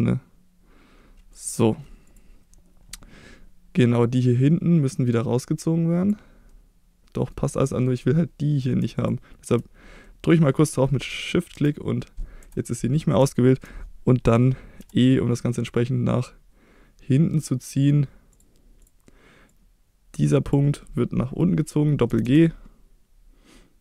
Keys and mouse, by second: 1.3 click, 2.1-6.1 drag, 6.5 middle click, 7.7 middle click, 10.0 middle click, 11.5 KP_1, 12.4 KP_3, 13.3 shift+middle click, 14.8 e, 18.3 click, 18.8-20.6 drag, 22.1 g, 22.3 g.